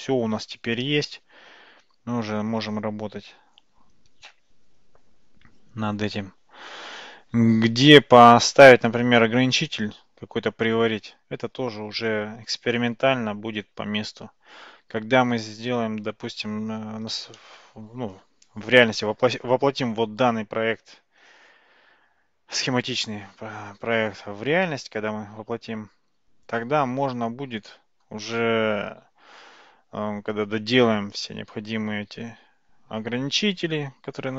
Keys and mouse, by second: 0.9-6.7 middle drag, 17.4-18.2 shift+middle drag, 19.3-28.1 middle drag.